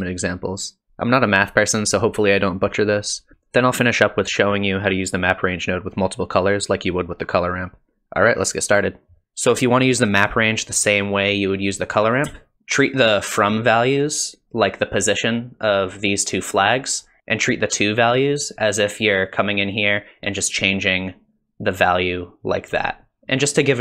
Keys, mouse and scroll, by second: 3.3 middle click, 3.5 ctrl+shift+click, 4.3 ctrl+shift+click, 5.0 ctrl+shift+click, 7.4 middle click, 7.4-8.2 scroll up 2, 7.4 n, 8.5 shift+click, 14.6 click, 19.6 click, 23.2 click.